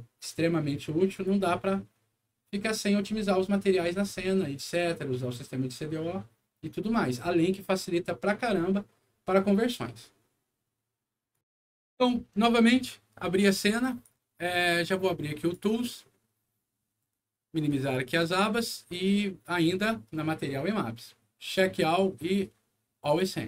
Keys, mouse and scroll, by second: 1.1 click, 11.3 click, 13.8 click, 15.3 click, 17.6 click, 18.8 click, 21.4 click, 23.0 click.